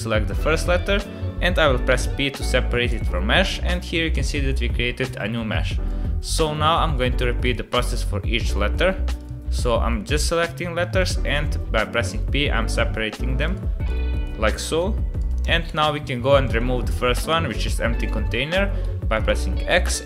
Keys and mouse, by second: 1.9 p, 5.9 click, 7.1 p, 7.9 click, 8.9 p, 9.6 click, 10.6 p, 11.4-12.7 drag, 13.1 p, 13.9 click, 14.7 p, 15.6 Tab, 18.8 x.